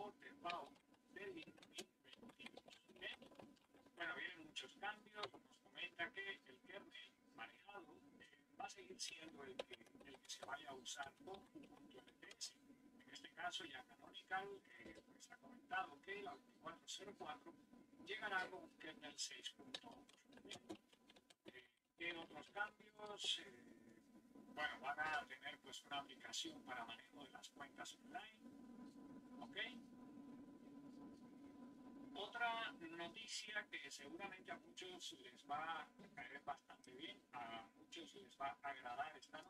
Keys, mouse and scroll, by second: 0.0-4.6 typing, 8.2-12.0 typing, 14.0 typing, 18.9-22.6 typing, 24.3 typing, 36.2-38.9 drag, 39.2 click.